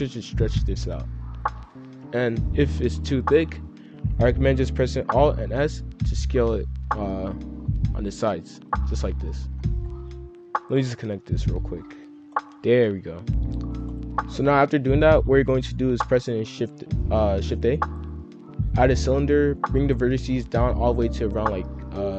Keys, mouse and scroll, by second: 1.4 click, 2.7 scroll down 2, 5.1 alt+s, 7.5-8.3 scroll down 2, 8.3 middle click, 8.7-9.5 scroll up 4, 9.5 middle click, 10.2 click, 10.9 click, 12.1 F2, 13.4 F3, 13.4-13.8 scroll down 3, 13.9 click, 16.3 shift+a, 19.1 scroll down 2, 20.2-22.1 drag.